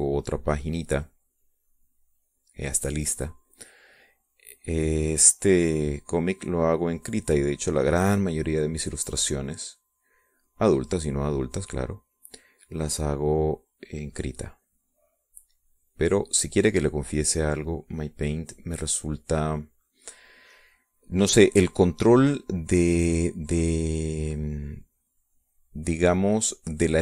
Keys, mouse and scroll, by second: 2.1-3.3 drag, 3.5 middle click, 4.9-8.9 drag, 9.9-13.1 drag, 13.8-19.6 drag, 20.3 click, 21.0 middle click, 22.0-26.8 drag, 26.8 middle click, 26.9-27.0 drag.